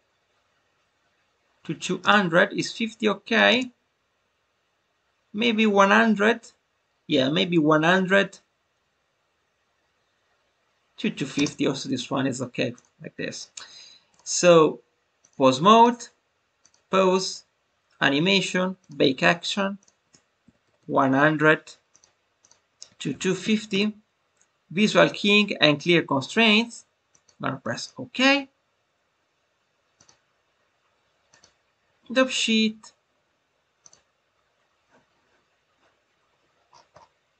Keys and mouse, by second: 2.0 space, 2.6-3.3 drag, 11.3 space, 15.2-15.8 drag, 16.6-28.2 drag, 29.9-31.4 drag, 33.8-37.3 drag.